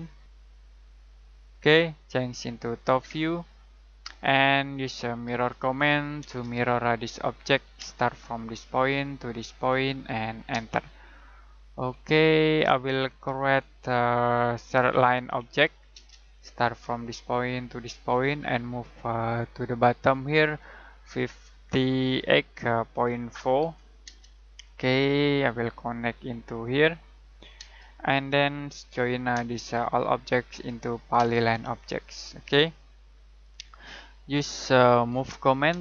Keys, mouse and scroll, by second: 4.2-4.8 scroll down 1, 4.8 middle click, 5.2 m, 6.2 space, 6.6 click, 7.8 space, 8.6 click, 10.5 space, 10.9 middle click, 11.7-12.1 scroll up 1, 13.1 middle click, 13.4-13.9 scroll up 1, 13.9-15.3 scroll down 1, 15.3 l, 15.9 space, 16.7 click, 22.0-24.1 typing, 26.2 click, 27.5 space, 28.8 j, 29.3 space, 30.0 click, 31.1 space, 35.1 m, 35.7 space.